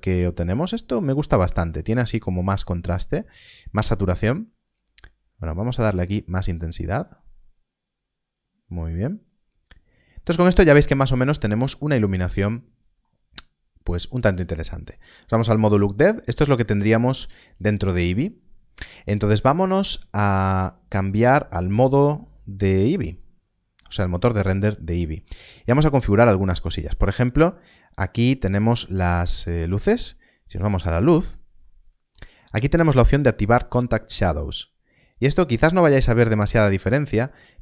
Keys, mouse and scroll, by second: 12.1 middle click, 20.1 click, 29.4 click, 31.6 middle click, 34.0 middle click, 37.1 middle click.